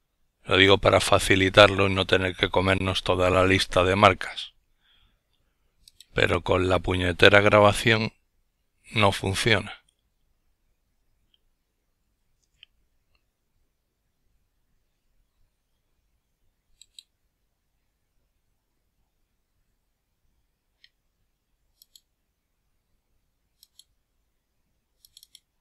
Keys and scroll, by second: 3.1 ctrl+f, 7.8 ctrl+f, 24.6 ctrl+f.